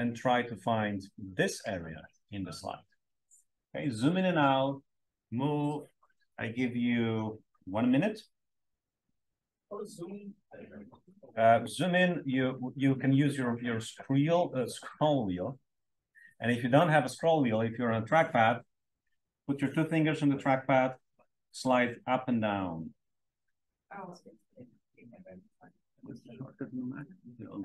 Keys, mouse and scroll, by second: 10.5 drag, 10.6-11.0 drag, 11.7 click, 12.2-18.0 scroll up 1, 18.0-19.0 scroll up 1, 19.0-20.0 scroll up 1, 20.0-20.7 scroll up 1, 20.7 scroll down 3, 20.9 scroll, 21.0-21.3 scroll down 1, 21.3 scroll, 21.4 scroll up 2, 21.6 scroll, 22.0-22.6 scroll down 3, 22.6 scroll up 2, 22.7 scroll, 23.0 scroll down 1, 23.2 scroll up 2.